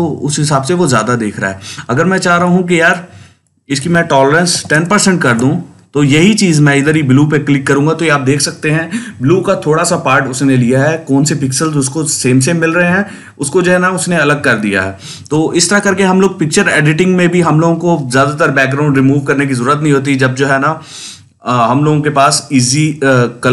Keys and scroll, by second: 0.7 ctrl+z, 4.1-5.1 typing.